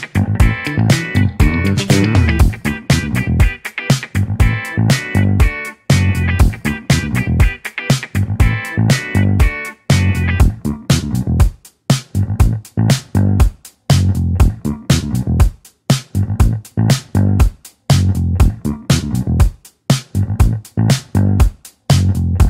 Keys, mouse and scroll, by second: 5.2 s, 7.9 click, 8.2-11.2 middle drag, 12.5-13.7 scroll down 1, 13.7-17.5 middle drag, 17.5-18.0 scroll down 4, 18.0-20.4 middle drag, 21.2-22.4 alt+super+middle drag.